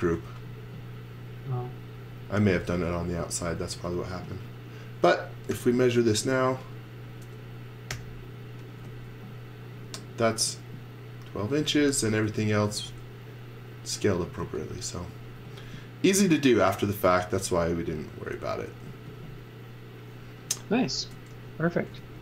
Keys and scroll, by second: 0.0 x, 3.0 z, 3.7 space, 5.5 t, 7.9 t, 12.1 space, 12.4 x, 12.7 v, 14.4 z, 15.4 x, 18.9 z, 21.0-22.2 typing.